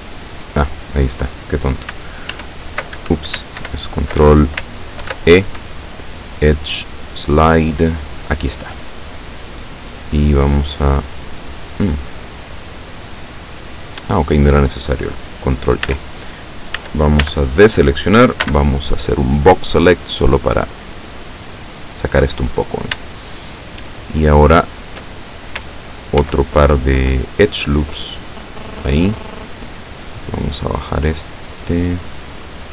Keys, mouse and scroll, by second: 0.3-0.6 scroll down 1, 0.8-1.1 scroll up 1, 2.4 alt+e, 3.1 alt+Escape, 3.7 ctrl+w, 4.3 ctrl+Escape, 5.1 ctrl+e, 8.8 click, 10.5 click, 11.5-14.2 drag, 15.9 Tab, 16.9 Tab, 17.3 a, 18.6 b, 18.8 click, 20.0-22.2 drag, 23.4-25.2 shift+middle drag, 26.3 ctrl+r, 27.8 scroll up 2, 28.4 click, 31.2-32.5 drag.